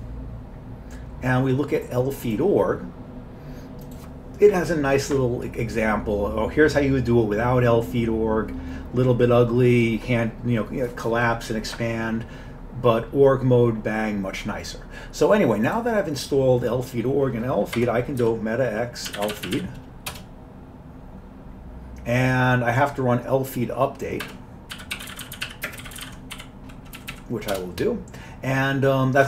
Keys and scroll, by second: 17.8 Escape, 18.3-20.1 typing, 20.1 Return, 24.3 Escape, 24.6-26.9 typing, 27.0 Down, 27.2 Down, 27.6 Return.